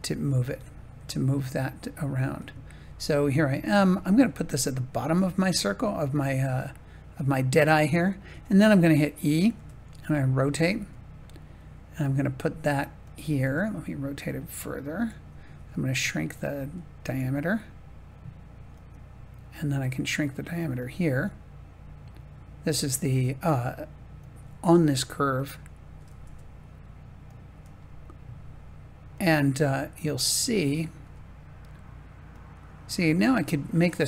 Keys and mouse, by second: 0.4 g, 1.5 click, 2.8 g, 3.6 click, 4.2 r, 4.9 click, 5.1 g, 7.1-8.1 drag, 8.2 e, 9.3 click, 9.5 r, 10.5 click, 10.7 g, 13.0 click, 13.4 r, 15.0 click, 15.5 s, 16.2 click, 16.5 g, 18.7 click, 19.7 click, 21.1 g, 24.1-25.4 drag, 26.2 r, 27.5 g, 29.1-30.4 drag, 31.0 g, 32.2-34.0 drag.